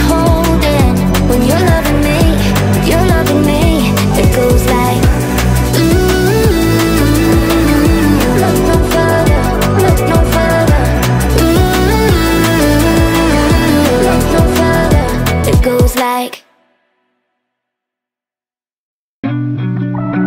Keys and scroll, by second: 2.8 space, 14.4 Delete, 15.6 ctrl+z, 17.8 Delete.